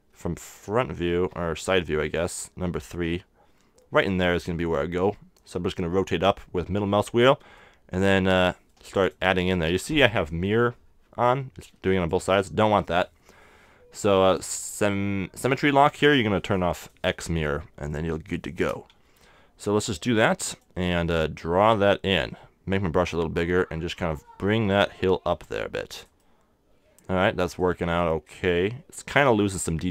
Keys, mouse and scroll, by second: 1.1 KP_1, 1.6 KP_3, 2.1-5.9 middle drag, 7.6-13.1 drag, 9.4 super+z, 9.7 super+z, 12.3 z, 14.2-16.1 drag, 16.8-19.9 drag, 19.1 super+z, 20.1 f, 20.9-22.9 super+drag, 26.2-28.0 middle drag, 27.6-29.5 drag.